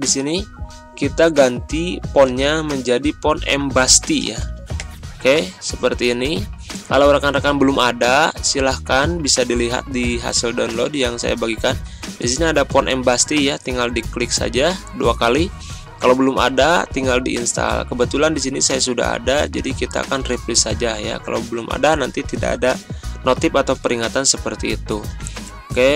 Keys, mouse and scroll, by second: 2.3 click, 7.7 Return, 9.5 click, 10.8-15.3 drag, 25.3 alt+Tab.